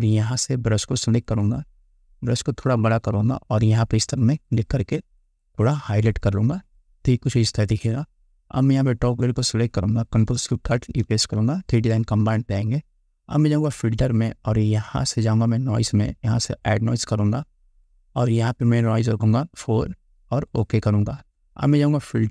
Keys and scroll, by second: 2.5 ], 11.1 ctrl+alt+shift+e.